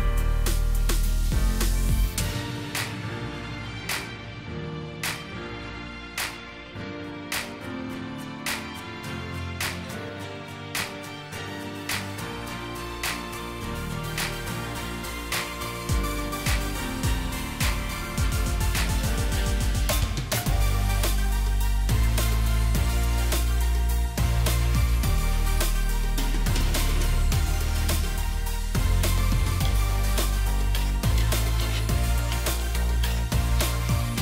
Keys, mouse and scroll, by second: 9.1 right click, 10.6 double click, 21.5-21.8 alt+scroll up 1, 26.9 shift+click, 27.6 shift+click, 27.7 ctrl+g, 28.5 double click, 29.9 click, 30.1 ctrl+c, 30.8 double click, 31.4-33.1 typing, 34.0 right click.